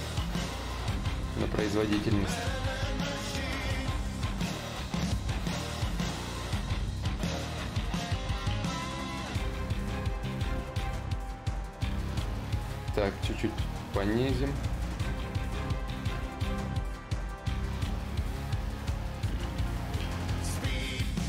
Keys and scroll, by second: 10.1 ctrl+z, 11.7 ctrl+z, 11.7 /, 12.2 space.